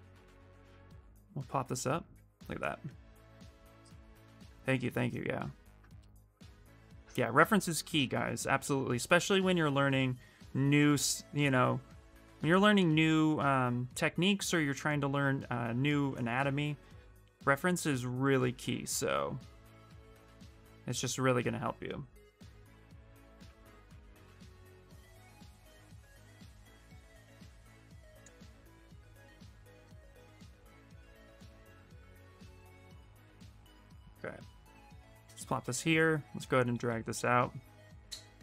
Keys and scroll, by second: 0.0 w, 23.1 q, 27.0 w, 35.4 q, 36.6 w.